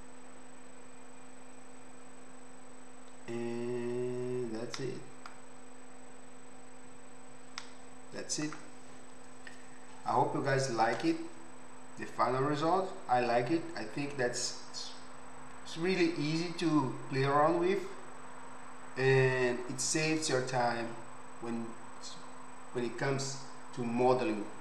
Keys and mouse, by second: 5.1-6.9 right drag, 6.9-24.6 middle drag.